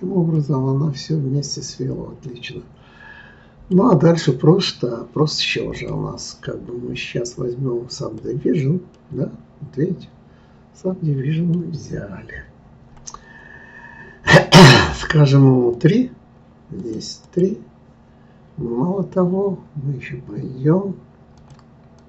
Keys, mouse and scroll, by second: 0.3-3.4 middle drag, 5.7-8.7 drag, 8.9-11.9 middle drag, 15.7 click, 16.8 click, 21.3 click.